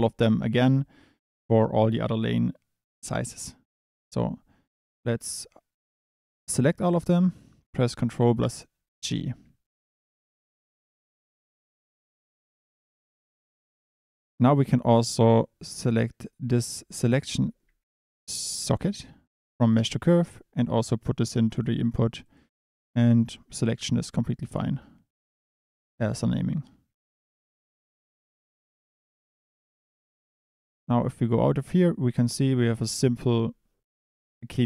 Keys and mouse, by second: 4.1 drag, 9.1 ctrl+g, 11.1 click, 14.0 click, 15.8 click, 18.5 middle click, 22.2 click, 29.0 Tab, 30.0 click, 30.8 click.